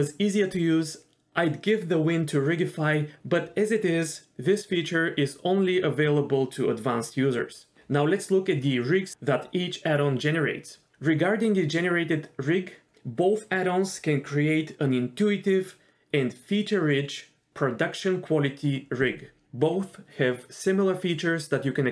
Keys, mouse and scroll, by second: 4.5 g, 4.8 middle click, 5.0-5.6 scroll down 2, 5.6 KP_0, 5.7 KP_Decimal, 6.0-6.6 scroll down 6, 6.6 middle click, 6.9 middle click, 7.5-7.9 d, 7.8 click, 12.4 click, 13.2 shift+drag, 13.9 shift+click, 14.1 shift+click, 15.0 click, 15.5-16.7 drag, 16.8-17.6 scroll up 3, 16.9 shift+middle click, 17.6 scroll up 1, 17.8-18.3 drag, 18.5-19.3 drag, 19.6-21.1 drag, 21.2 scroll down 2, 21.3 shift+middle click, 21.4 scroll up 1, 21.5 click.